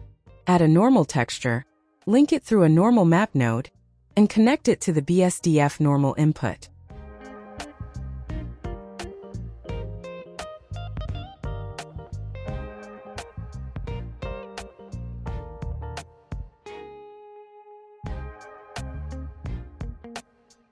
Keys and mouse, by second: 0.1 click, 1.6 click, 5.8 drag, 7.8 click, 9.7 click, 10.7 click, 13.4 click, 15.2-17.4 drag, 19.0 click.